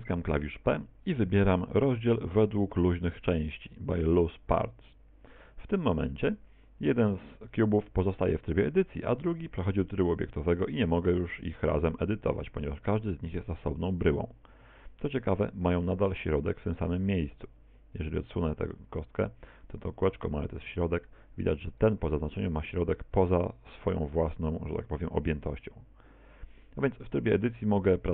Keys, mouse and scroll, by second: 0.1 p, 8.9 Tab, 9.7 right click, 10.9 right click, 11.3 right click, 11.6 right click, 11.9 right click, 12.1 Tab, 12.6 Tab, 12.9 right click, 13.1 Tab, 13.5 Tab, 14.1 right click, 14.2 Tab, 14.6 Tab, 17.3 g, 19.1 click, 21.8 right click, 27.9 middle click.